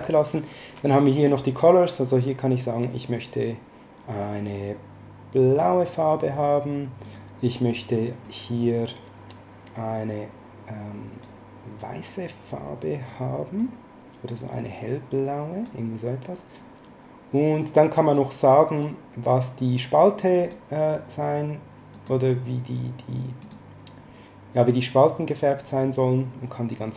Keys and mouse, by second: 1.1 click, 7.0 click, 8.2 click, 11.8 click, 13.5 click, 20.4 click, 21.9 click, 23.4 click, 25.5 click.